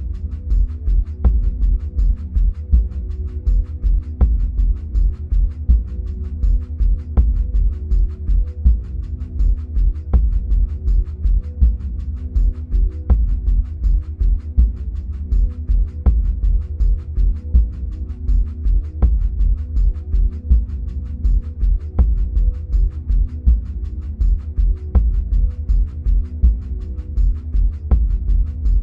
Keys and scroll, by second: 5.7 Right, 9.6 Right, 20.5 Left, 21.7 Right, 27.6 ctrl+c, 27.8 ctrl+v.